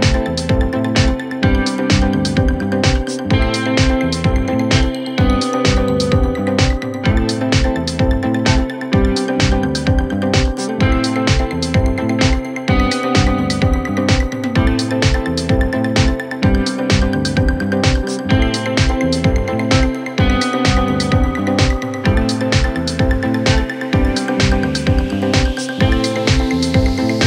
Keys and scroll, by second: 0.5 ctrl+F1, 1.9 4, 3.5 3, 15.4 \, 15.9 ], 16.6 ], 24.9 Delete, 26.4 4.